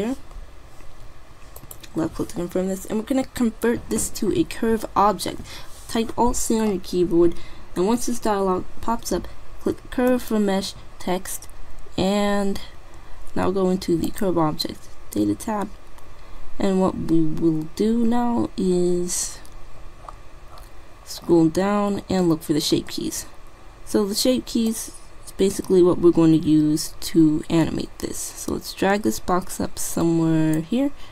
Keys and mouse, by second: 1.7-3.4 right drag, 4.4 alt+c, 14.1-15.9 drag, 14.2 typing, 21.0-23.8 middle drag, 24.7-26.4 drag.